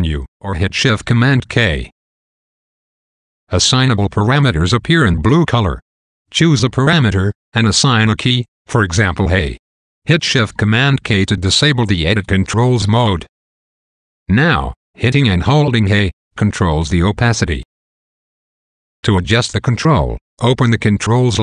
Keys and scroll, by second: 0.5 shift+super+k, 8.7 a, 11.0 shift+super+k, 12.9 a, 14.7 a, 15.9 a.